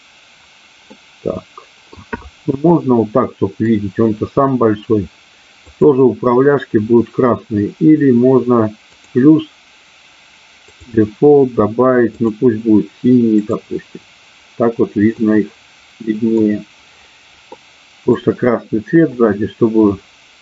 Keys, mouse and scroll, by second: 0.9-2.0 middle drag, 2.9 middle click, 9.0 click, 10.6-12.4 drag, 13.4 click, 15.1-16.4 middle drag, 17.5 middle click, 19.1-20.4 middle drag.